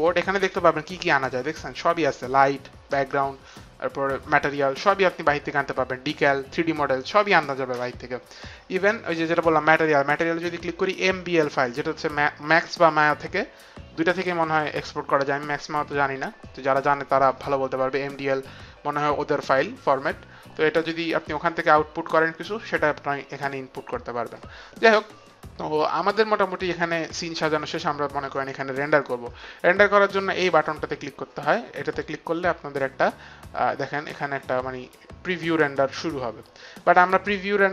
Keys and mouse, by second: 9.6 click, 23.4 click, 31.8 click, 33.9 click.